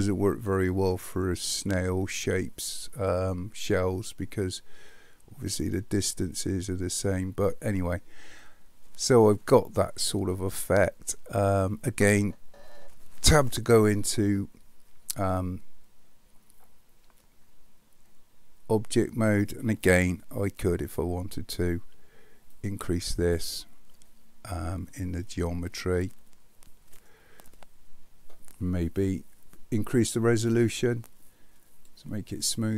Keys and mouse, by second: 13.2 Tab, 22.6 click, 25.4-27.1 middle drag, 30.7-31.9 drag.